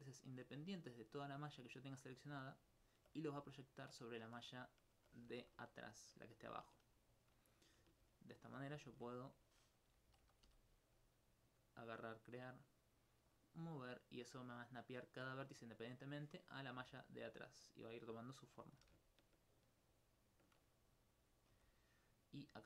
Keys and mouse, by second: 1.6 click, 4.7 alt+click, 7.4 right click, 8.1 ctrl+g, 9.4 click, 9.6 right click, 13.3 click, 16.8 w, 17.7 click, 18.8 g, 20.9 right click, 21.5 g.